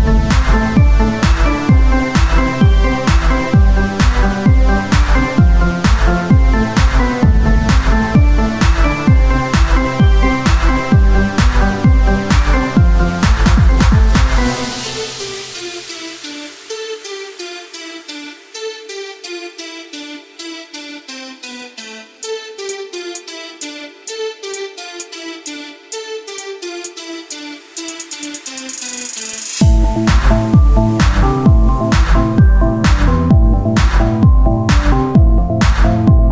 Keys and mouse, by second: 3.2 KP_3, 4.1 e, 6.0-12.0 drag, 12.6 r, 14.6 e, 16.7 click, 20.8 Tab, 22.1 click, 23.7 Tab, 24.9 ctrl+r, 27.5-30.9 right drag, 28.5 o, 29.0 s, 32.5 click, 33.2 Tab, 33.9 Tab, 36.0 ctrl+r.